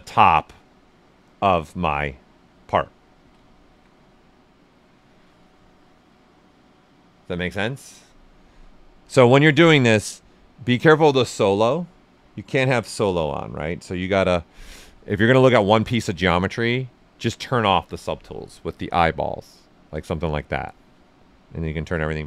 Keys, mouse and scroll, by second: 2.8 ctrl+right click, 9.0-19.3 drag, 21.5 shift+click.